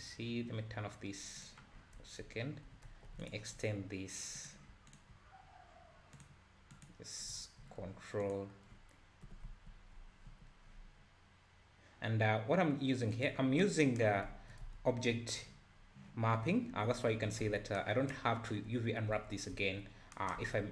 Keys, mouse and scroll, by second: 1.4 click, 1.7-2.1 scroll up 3, 2.1 Tab, 2.9 1, 3.2 alt+click, 3.7-4.4 scroll down 1, 4.4 click, 4.9 ctrl+click, 6.2 click, 6.7 click, 7.3 `, 8.2 ctrl+click, 9.3 e, 14.2 scroll up 1, 14.3 `, 14.7 Tab, 15.1 `, 15.7-16.8 scroll up 2, 16.8 `, 17.5 Tab, 19.1 Tab, 19.5 `, 20.4 Tab.